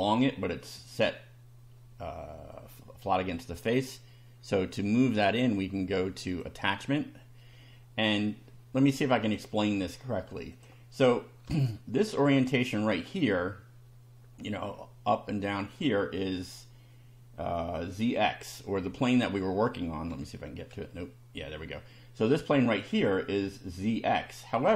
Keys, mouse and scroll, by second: 6.3 click, 9.2 click, 10.5 click, 11.4-12.2 shift+middle drag, 19.3 click, 20.1 2, 21.2 1.